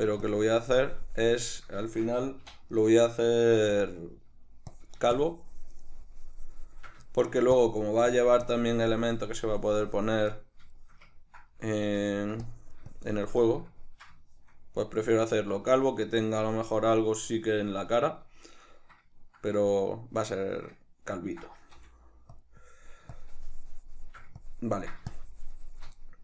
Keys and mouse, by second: 1.9-3.9 shift+middle drag, 3.6 f, 3.9 click, 4.0 shift+middle click, 4.8-7.2 drag, 7.2 shift+middle click, 7.6-10.4 drag, 10.4-12.5 middle drag, 12.5-13.5 drag, 13.5-22.5 middle drag, 21.8 f, 22.6-26.0 drag, 26.0-26.2 ctrl+middle drag.